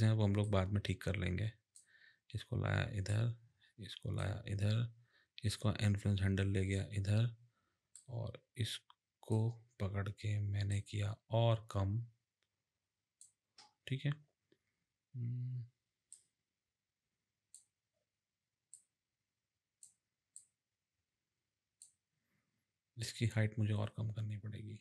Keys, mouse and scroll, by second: 0.5 click, 3.1 click, 5.5 click, 10.7 click, 16.1 click, 18.7 click, 20.3 click, 23.0 click.